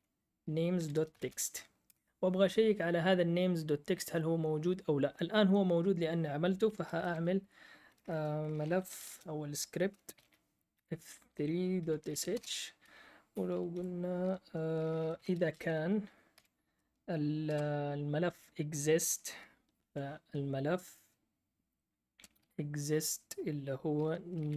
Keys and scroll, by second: 0.0-1.7 typing, 1.8 Return, 6.7-12.6 typing, 13.7 F8, 13.7 typing, 14.9-16.3 typing, 17.5 space, 19.5-20.2 typing, 22.1-23.0 typing, 24.2-24.5 typing.